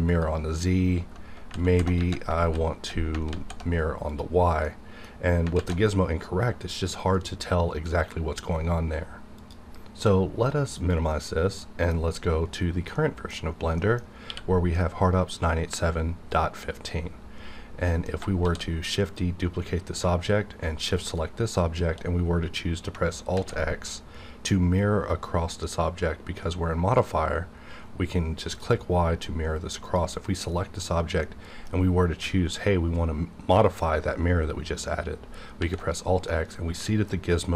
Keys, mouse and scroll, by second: 0.1 click, 1.3 z, 2.4 alt+z, 3.3 alt+x, 4.1 click, 4.6 middle click, 5.5 alt+z, 9.5-11.4 drag, 11.6 middle click, 11.9-12.9 scroll down 1, 13.3 middle click, 14.2 q, 17.5-17.8 scroll down 1, 17.8 middle click, 18.4 shift+d, 19.0 shift+click, 23.3 alt+x, 28.6 click, 31.2-35.6 middle drag, 35.6 alt+x, 36.3-37.5 middle drag.